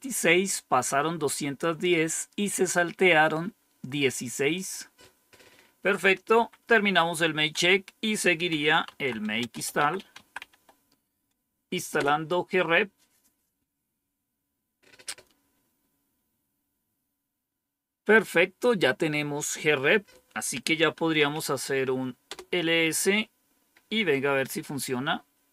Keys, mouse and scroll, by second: 4.4 click, 6.2 Up, 7.4 Down, 8.2-11.0 typing, 11.9 Return, 20.7-21.6 typing, 22.2 Return, 25.4-25.5 typing.